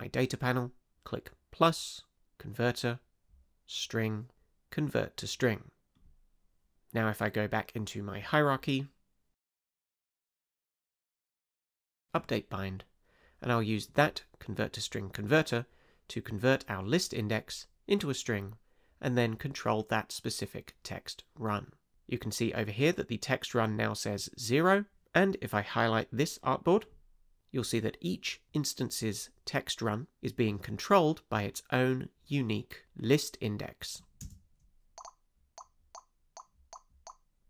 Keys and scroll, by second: 34.2 space.